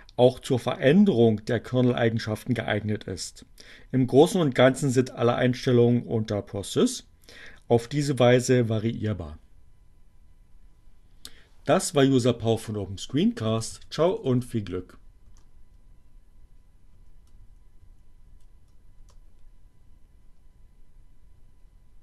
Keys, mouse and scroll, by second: 11.8-12.8 typing, 14.4 t, 14.8 Return, 17.0 Up, 18.3 Return.